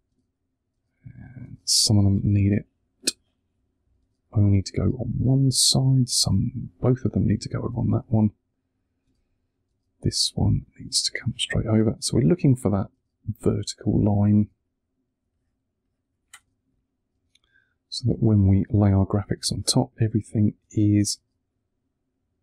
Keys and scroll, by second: 0.0 space, 2.9 1, 3.9 space, 6.9 1, 10.5 space, 11.0 1, 12.0 space, 15.1 1, 16.2 space, 19.3 1, 20.5 space.